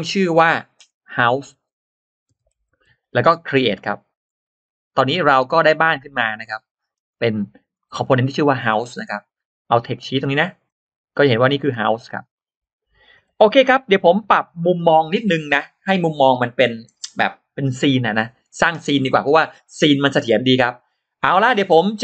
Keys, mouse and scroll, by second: 4.1 click, 5.2 click, 5.7 scroll down 1, 6.3 middle click, 6.7-7.1 scroll down 1, 7.3 click, 7.6 middle click, 8.7-9.0 scroll down 1, 10.5 click, 11.2 click, 12.0 click, 12.2 click, 13.3 click, 13.3 e, 13.7-14.1 scroll down 1, 14.0 middle click, 21.2 middle click.